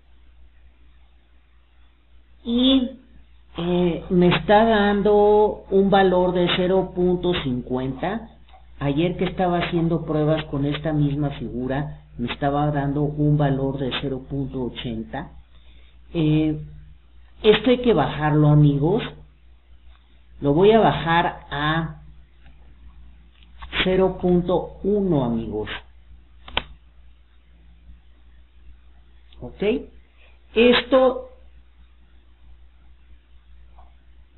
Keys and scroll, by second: 16.6 KP_0, 16.8 KP_Decimal, 19.4 Return.